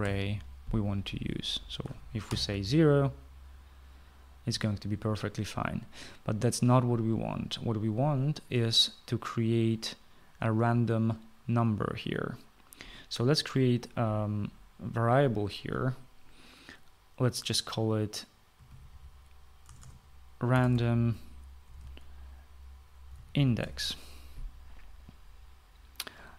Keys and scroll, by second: 0.0-0.8 typing, 4.1 0, 7.6 typing, 19.1-22.5 typing, 23.6-24.9 typing.